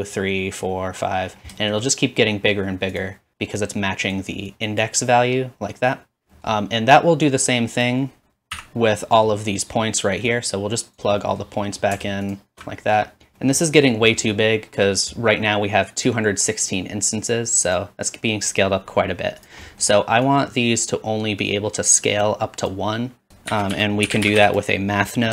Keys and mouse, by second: 2.4-3.6 middle drag, 3.0 click, 3.6-7.9 drag, 7.9-10.4 middle drag, 8.6 x, 10.4 click, 12.3 alt+shift+click, 13.3-17.7 middle drag, 17.7-20.8 drag, 22.1-25.3 drag, 23.5 shift+a.